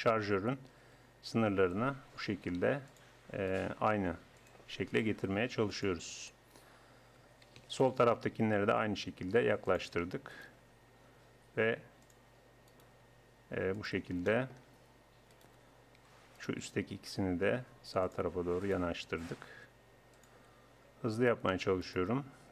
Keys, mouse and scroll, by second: 0.7-1.8 right drag, 1.0 g, 3.5-6.7 right drag, 3.9 g, 5.2 g, 7.2 a, 7.7-9.1 right drag, 8.9 g, 9.3 right click, 9.5 click, 10.3 right click, 10.5 click, 11.3 right click, 11.3 g, 11.8 click, 12.7 click, 13.1-14.3 right drag, 13.1 g, 14.3 middle click, 15.4 middle click, 16.1-17.1 right drag, 17.1 g, 19.0 g.